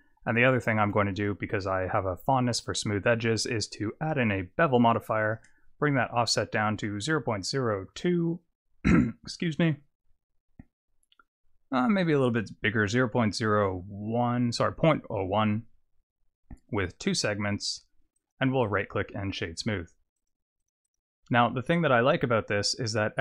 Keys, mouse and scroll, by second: 0.7 click, 1.2 click, 5.2 click, 9.3-10.4 scroll up 10, 10.7-11.4 scroll down 1, 11.9 click, 16.9 click, 18.2 right click, 19.6-19.9 scroll down 4, 20.2 click, 20.6 right click, 21.7-22.3 scroll down 3, 21.9-22.3 scroll up 1.